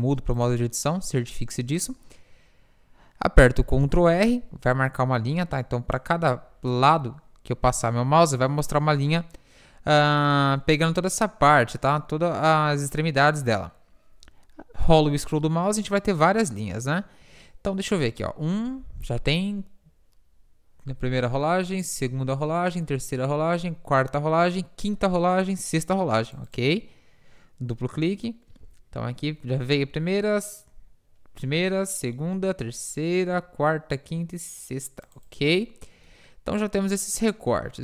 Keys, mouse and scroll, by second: 3.9 ctrl+r, 28.6 ctrl+r, 36.4 middle click.